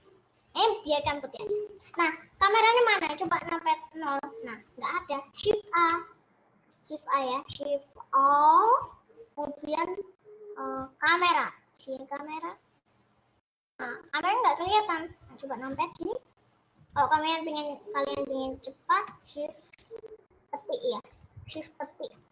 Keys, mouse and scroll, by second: 1.0 scroll down 2, 1.1-1.6 scroll up 3, 1.8-5.1 middle drag, 5.1-5.5 scroll down 1, 6.8 shift+a, 13.9 middle click, 14.8-15.7 scroll up 1, 15.7 KP_0.